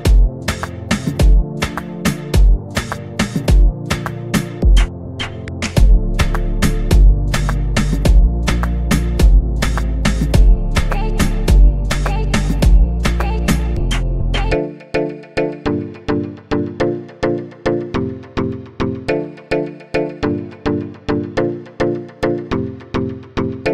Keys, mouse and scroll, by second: 0.0 click, 1.0-1.8 scroll down 7, 2.4-3.3 scroll down 5, 6.7-7.1 scroll down 1, 9.2 click, 10.7-11.0 scroll up 2, 15.2-15.9 scroll down 2, 15.9-18.9 scroll down 1, 19.5-20.2 scroll up 2, 20.2-22.2 scroll up 4, 22.2-23.1 scroll up 1.